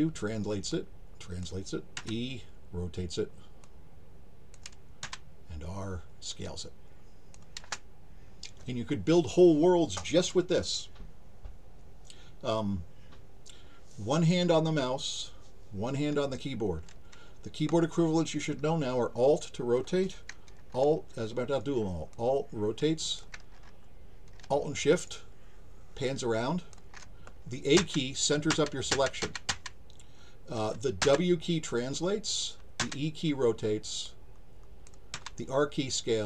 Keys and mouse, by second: 0.7 click, 3.6 click, 6.3-7.3 drag, 22.1-23.2 alt+drag, 24.9-26.7 alt+shift+drag, 31.9 click, 34.0 click.